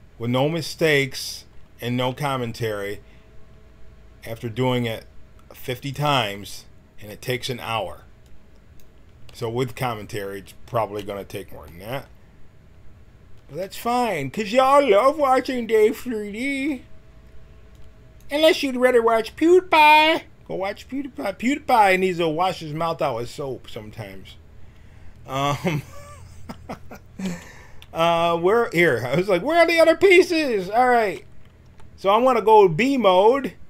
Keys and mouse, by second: 2.0 s, 8.2-11.6 drag, 13.6 t, 17.8-19.5 drag, 19.1 middle click, 23.1-31.0 middle drag, 31.0 a, 31.6 b.